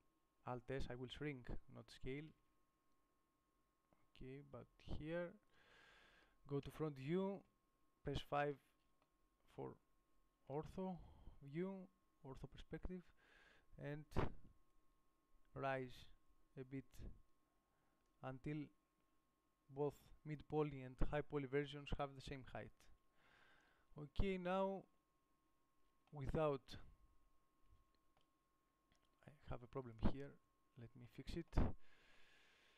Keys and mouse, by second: 2.5 alt+s, 7.0 KP_1, 7.7 KP_5, 22.8 KP_7, 24.7 Tab, 29.8 Tab, 30.7 KP_Decimal.